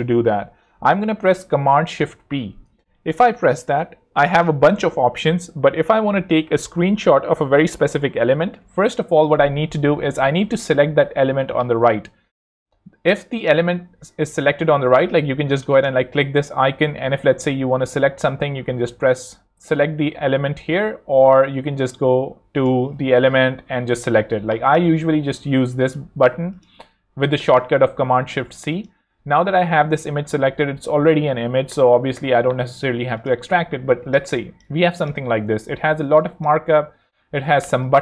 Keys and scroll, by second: 2.0 shift+super+p, 8.4 Escape, 27.5 shift+super+c.